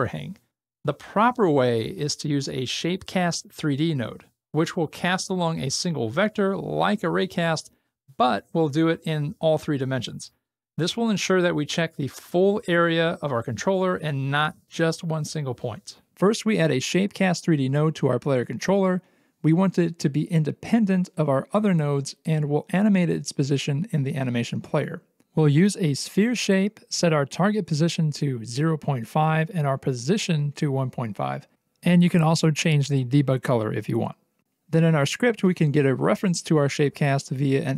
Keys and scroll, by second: 16.7 alt+x, 19.5-20.4 typing, 26.0 alt+x, 31.2 Return, 32.1 KP_1, 32.5 BackSpace, 32.6 5, 32.8 Return.